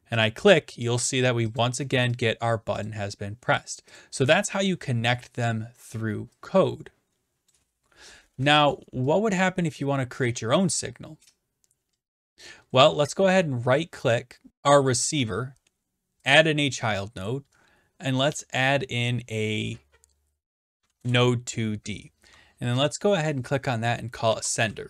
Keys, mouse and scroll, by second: 0.3 click, 1.0 click, 1.6 click, 2.2 click, 2.9 click, 4.9 click, 7.5 click, 9.4 click, 13.4 right click, 14.5 click, 14.7 right click, 16.3 click, 21.0 Return, 22.9 click, 24.3-24.8 typing.